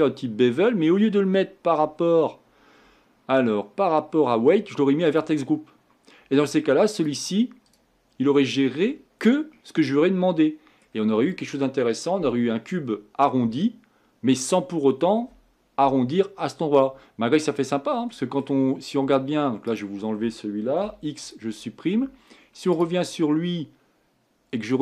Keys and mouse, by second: 20.8 x.